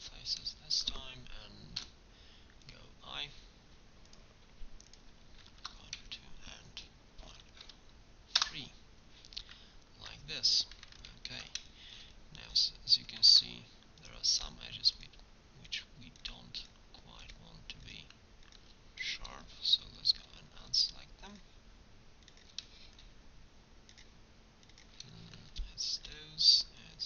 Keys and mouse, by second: 1.8 i, 3.4 middle click, 6.0-10.5 middle drag, 13.2 ctrl+Tab, 16.4 click, 22.9 middle click, 24.6 click, 26.7-27.0 drag.